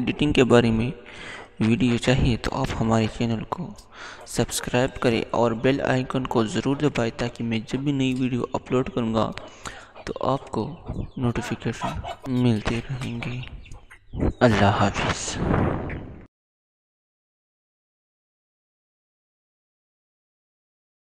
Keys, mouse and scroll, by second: 16.1 click.